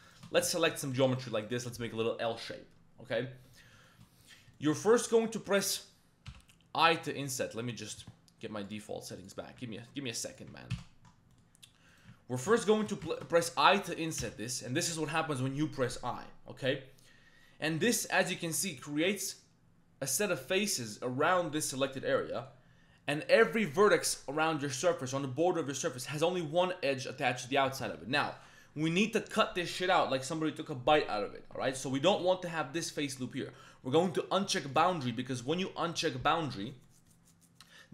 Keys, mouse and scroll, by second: 0.1 shift+click, 0.5 ctrl+shift+click, 1.1 shift+click, 1.4 shift+click, 3.9 shift+click, 4.6 shift+click, 4.7 middle click, 6.3 i, 7.8-9.3 drag, 10.3 click, 10.8 ctrl+z, 11.3 middle click, 12.8 shift+click, 13.1 ctrl+shift+click, 13.4 middle click, 13.8 middle click, 14.2 i, 18.9 shift+middle click, 21.9 middle click, 25.6 middle click, 34.7 click, 36.1 middle click, 36.8 middle click.